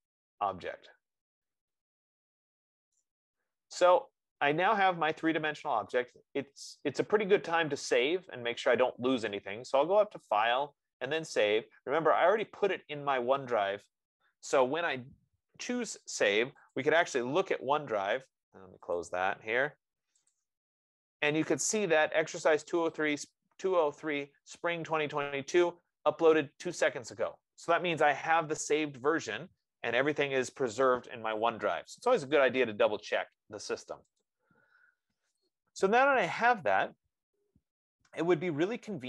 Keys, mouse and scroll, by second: 3.1 right click, 4.1 middle click, 10.8 click, 12.8 click, 17.1 click, 19.5 click, 20.4 F15, 20.8 click, 21.3 click, 34.6 click, 35.7-36.4 scroll.